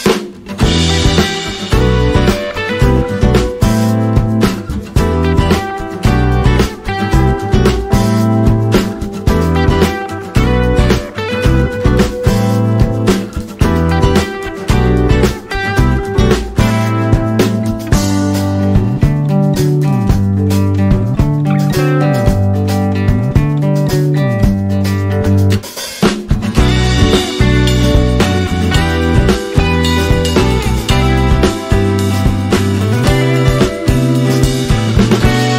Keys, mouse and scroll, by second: 0.9 scroll down 1, 2.5 alt+click, 4.6 ctrl+d, 6.4 alt+scroll down 1, 9.0 click, 16.4 click, 17.1 BackSpace, 17.7 click, 22.8 click, 24.3 alt+scroll up 1, 25.6 click, 27.2 ctrl+z, 27.6 alt+scroll up 1, 28.1 click, 28.7 scroll up 1, 30.2-31.8 drag, 31.8 scroll up 1, 32.8-35.3 drag.